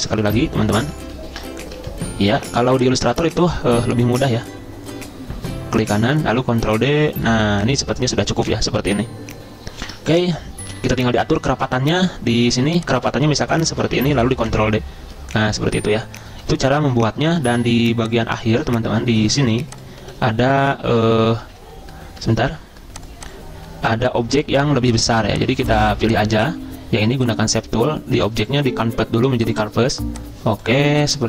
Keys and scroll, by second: 6.4 ctrl+d, 6.7 ctrl+d, 10.0 ctrl+z, 10.4 ctrl+z, 14.5 ctrl+d, 14.9 ctrl+d, 21.0 ctrl+z, 21.1 ctrl+z, 21.5 ctrl+x, 22.5 ctrl+d.